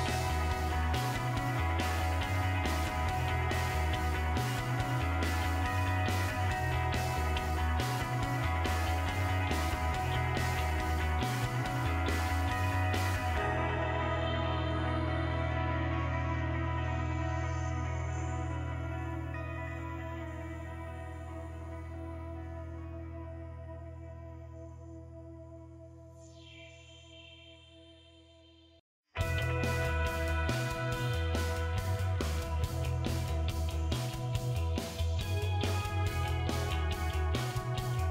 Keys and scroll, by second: 16.5-17.9 typing, 34.4 9.